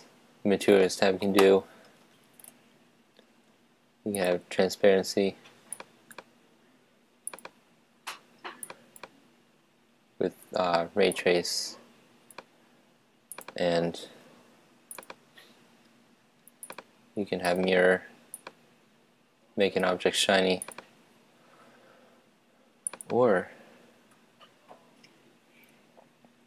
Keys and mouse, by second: 0.0 Escape, 0.6-2.6 drag, 4.2 click, 7.7-10.4 drag, 11.2-12.7 drag, 13.4-16.3 drag, 19.3 click, 20.7-22.5 drag, 23.0-24.9 drag.